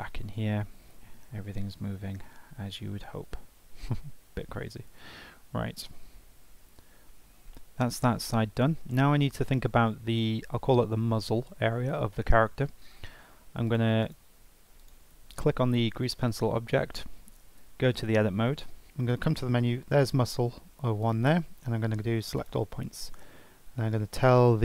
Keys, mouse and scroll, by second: 0.1 g, 3.3 r, 5.4 scroll down 2, 6.3 Tab, 6.8-7.1 scroll up 2, 7.1-8.2 scroll down 3, 8.2 scroll down 1, 8.3-8.9 scroll up 5, 8.9-13.6 shift+middle drag, 13.6-14.9 drag, 17.5 Tab, 19.1 click, 22.4-23.7 right drag, 23.7 shift+s.